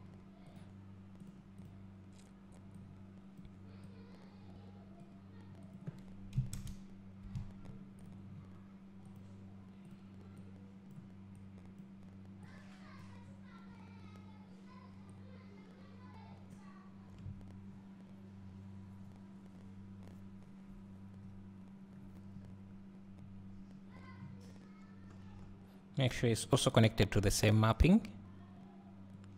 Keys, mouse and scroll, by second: 2.8-11.5 drag, 19.3-24.0 drag, 22.6 scroll up 1, 27.3-29.3 drag.